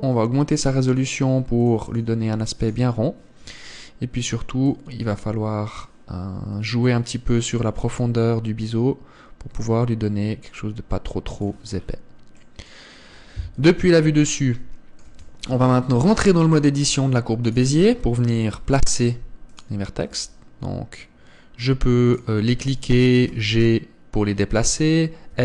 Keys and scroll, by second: 14.2 KP_7, 15.8 Tab, 19.1 g, 20.6 r, 23.9 g.